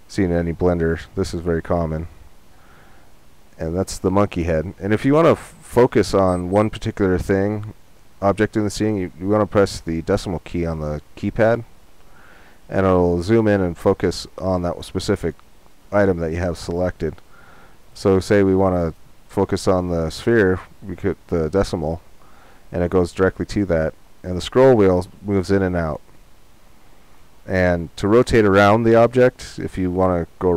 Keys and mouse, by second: 1.5-5.1 middle drag, 15.1-17.8 middle drag, 17.8-19.1 right drag, 19.1 middle click, 19.4-22.0 right drag, 24.0 middle click, 24.6 middle click, 25.1-26.3 middle drag, 30.3 middle click.